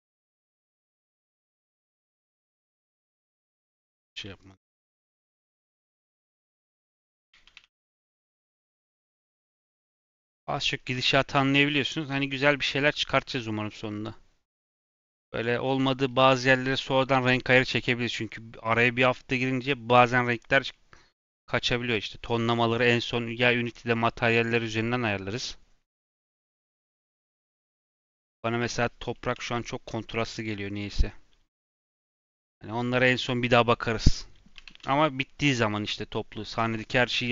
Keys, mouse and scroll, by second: 0.3 shift+click, 0.7 shift+d, 1.7 g, 2.8 x, 3.2 scroll up 2, 3.5 shift+middle click, 4.0 click, 4.4 shift+click, 5.0 g, 7.4-8.2 shift+r, 9.0 scroll down 6, 9.6 click, 10.0 middle click, 10.3 scroll up 3, 10.7 shift+middle click, 11.5-11.9 scroll up 1, 11.9-14.9 shift+middle drag, 15.6-20.5 middle drag, 20.7 middle click, 21.4-24.4 scroll up 1, 29.1-30.3 middle drag, 30.3-30.8 scroll up 1.